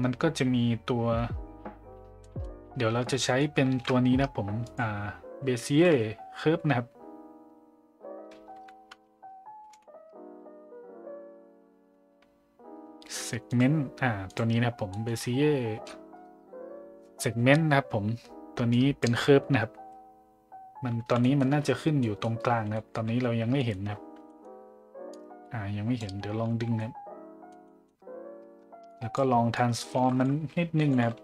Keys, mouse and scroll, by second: 2.2 middle click, 3.2 middle click, 3.7 shift+a, 14.9 middle click, 18.7 drag, 21.2 middle drag, 21.5 z, 22.0 middle drag, 22.7 middle drag, 23.6 middle click, 24.3 middle click, 25.1 click, 26.7-27.5 middle drag, 27.6 middle drag, 28.9 drag, 29.6 click, 29.9 shift+a.